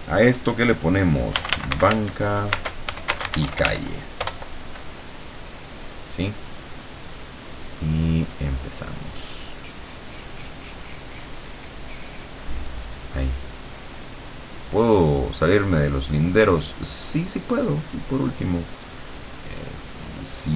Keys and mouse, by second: 1.2-4.2 typing, 4.2 Return, 6.7 click, 7.4 click, 8.4-20.5 drag.